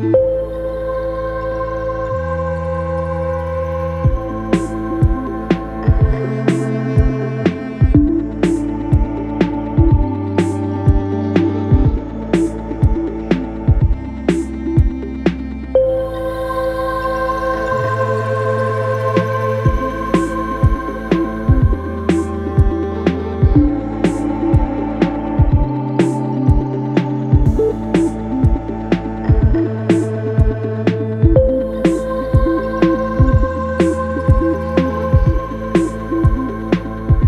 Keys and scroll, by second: 1.1 3, 9.6 4, 12.3 2, 21.6 4, 24.0 3, 24.3 ], 25.0 ], 26.9 ], 27.4 ], 32.8 4.